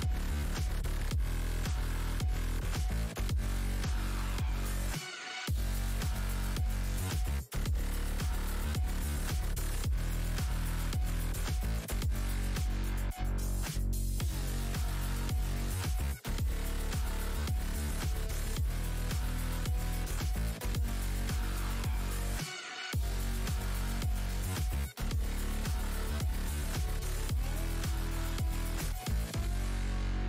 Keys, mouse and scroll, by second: 0.2 scroll up 1, 1.0 shift+click, 2.5 shift+click, 2.9-5.4 typing, 4.4 click, 6.7 alt+click, 7.0-7.4 alt+scroll up 1, 7.4 shift+v, 8.8 1, 10.2 F8, 10.5-11.4 scroll down 1, 11.4 click, 12.0-12.7 scroll up 2, 12.9 space, 13.3 f, 14.2 scroll down 1, 14.9 scroll down 1, 14.9 `, 15.6-15.9 scroll down 1, 18.0 space, 19.5 `, 20.6 alt+scroll down 1, 21.8 w, 22.8 click, 23.6-24.1 alt+scroll down 1, 24.2 click, 24.5 space, 25.1 click, 26.1 ctrl+s, 30.0 alt+click.